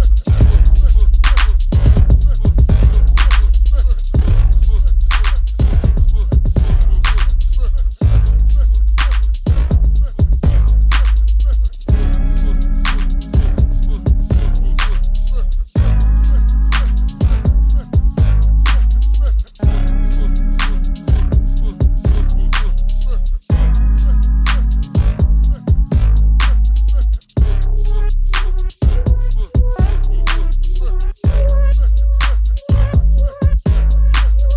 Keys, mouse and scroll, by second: 10.0 b, 10.7-12.3 drag, 12.3 Delete, 13.3-15.0 drag, 13.8 shift+a, 30.5 right click, 31.3 click, 31.5 right click, 31.6 middle click, 33.4 click.